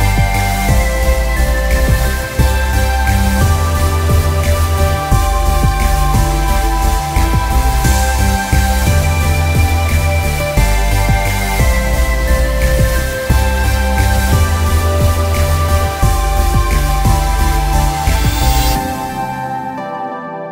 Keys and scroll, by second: 12.0 ctrl+shift+i, 15.6 Return, 16.6 ctrl+shift+i, 19.3 Delete.